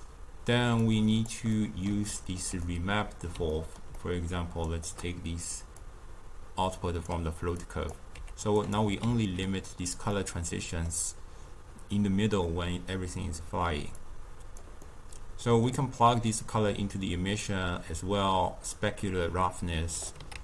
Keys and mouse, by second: 0.7-1.5 drag, 1.5-4.6 middle drag, 4.6-5.7 shift+right drag, 5.7-8.1 drag, 8.1 g, 9.0 ctrl+x, 10.1-13.8 middle drag, 13.8 click, 14.8-16.4 middle drag, 16.4-19.6 drag, 20.2 ctrl+a.